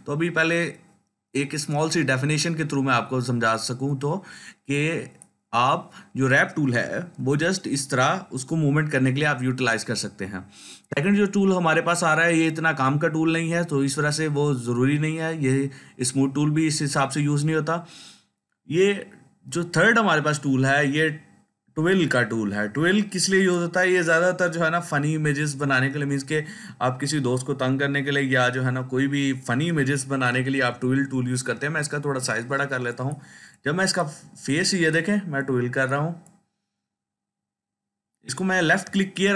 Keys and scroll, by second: 7.1 ctrl+z, 30.3-31.9 typing.